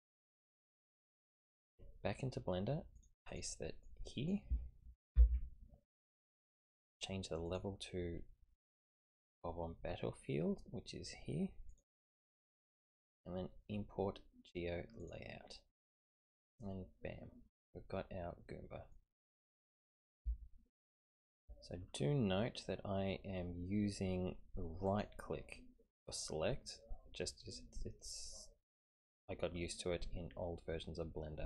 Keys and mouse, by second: 3.1-7.0 drag, 7.6-11.8 drag, 18.2-18.9 middle drag, 19.3-20.1 middle drag, 20.3-21.4 shift+middle drag, 24.9 click, 27.4-31.4 middle drag.